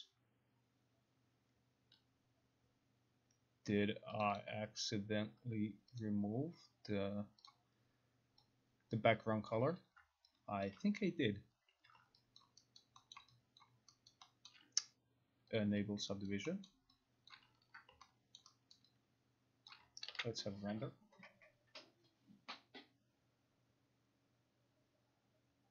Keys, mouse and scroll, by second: 4.3 click, 4.5 click, 6.1 click, 7.5 click, 9.6 click, 10.7 alt+click, 12.1 alt+click, 12.5 alt+click, 12.9 alt+middle click, 12.9 alt+click, 13.2 alt+right click, 13.2-13.7 alt+scroll, 13.7 alt+click, 14.2 alt+middle click, 14.2 alt+click, 14.5 alt+right click, 14.5-15.1 alt+scroll, 15.7 click, 16.3 alt+right click, 16.7 alt+middle click, 17.4 alt+click, 18.4 alt+middle click, 18.8 alt+right click, 19.8 alt+click, 20.2 ctrl+r.